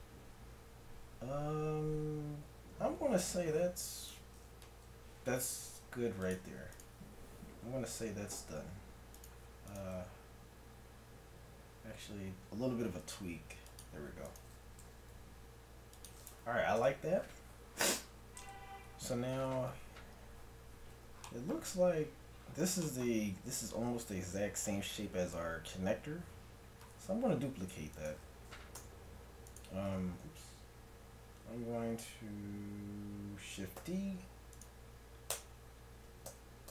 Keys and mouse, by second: 3.2 Tab, 5.4 g, 7.6 r, 9.7-11.6 right drag, 10.0 r, 14.3 right click, 14.8 g, 15.8 right click, 16.8 Tab, 27.9-31.2 right drag, 28.8 Tab, 29.9 Tab, 33.8 shift+d, 35.4 Tab, 36.4 a.